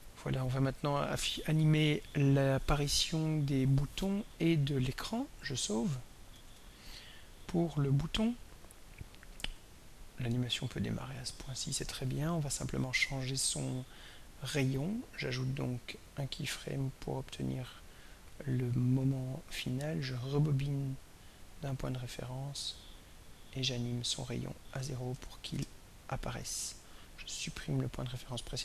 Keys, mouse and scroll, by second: 6.3 ctrl+s, 8.1 click, 15.5 click, 16.9 click, 18.5 click, 21.0 click, 23.5 click, 24.1 click, 25.1 0.